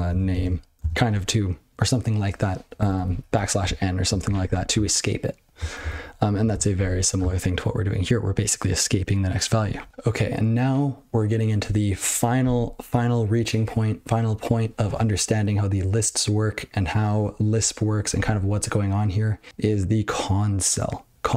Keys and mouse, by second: 0.0-0.9 typing, 2.8 BackSpace, 2.9 BackSpace, 3.1 BackSpace, 3.2 BackSpace, 4.2 ctrl+b, 4.4 ctrl+b, 5.8 ctrl+space, 6.1 ctrl+g, 6.4 ctrl+a, 6.5 ctrl+space, 6.6 ctrl+n, 6.8 ctrl+w.